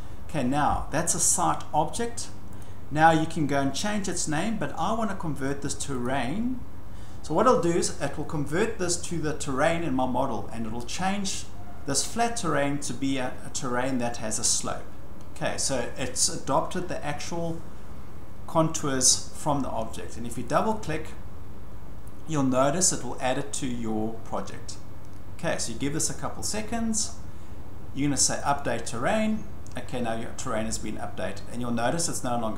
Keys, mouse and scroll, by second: 2.6 click, 6.0 click, 20.6 click, 20.7 click, 26.9 scroll up 6, 27.8-28.5 scroll, 28.5 click, 29.9-30.7 scroll.